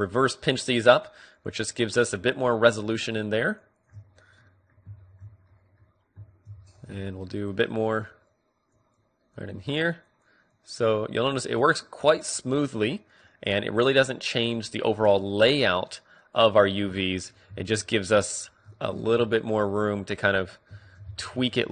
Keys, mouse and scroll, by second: 4.5-7.7 middle drag, 7.7-20.1 drag, 19.1-21.7 middle drag, 19.3 Tab, 21.5 Tab.